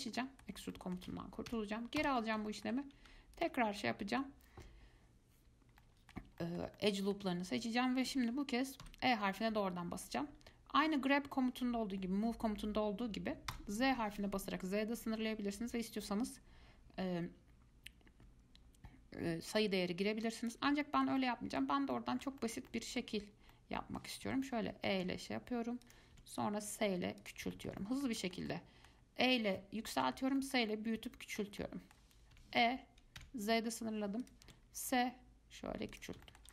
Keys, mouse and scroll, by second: 0.4-1.7 middle drag, 1.7 ctrl+z, 2.2 ctrl+z, 2.7 shift+middle click, 3.6 alt+click, 4.0-9.0 middle drag, 9.0 e, 21.0-21.8 shift+middle drag, 21.8 scroll down 2, 22.1-23.4 middle drag, 23.4 scroll up 1, 23.7 middle click, 24.4 e, 26.3 s, 27.7-32.5 shift+middle drag, 32.5 e, 34.7 s, 36.4-36.5 shift+middle drag.